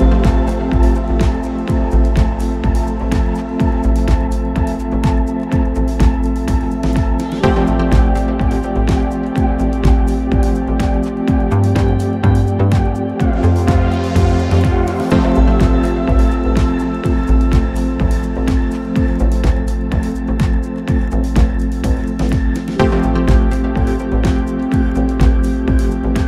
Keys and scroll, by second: 3.8 ], 4.1 ], 8.2 4, 9.5 3, 10.2 ], 10.4 ,, 11.7 ctrl+z, 12.3 ], 15.3 4, 16.5 3, 19.3 ctrl+d, 19.5 Escape.